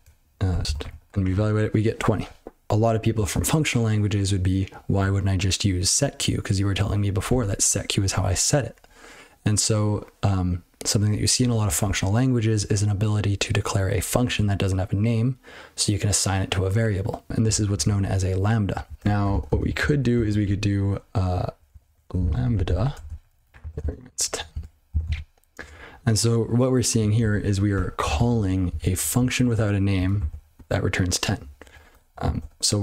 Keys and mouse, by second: 0.0-1.3 typing, 17.4 ctrl+n, 17.7 ctrl+p, 18.7 ctrl+p, 18.9 ctrl+a, 19.0 Tab, 19.3 ctrl+alt+space, 19.5 ctrl+alt+space, 19.8 ctrl+w, 20.1 (, 21.5-24.6 typing, 23.6 ctrl+f, 25.0 ctrl+c, 27.2 ctrl+a, 27.7 Tab, 28.1 ctrl+alt+f, 28.6 ctrl+b, 30.1 ctrl+alt+f, 31.6 ctrl+a, 31.9 Tab, 32.4 ctrl+d.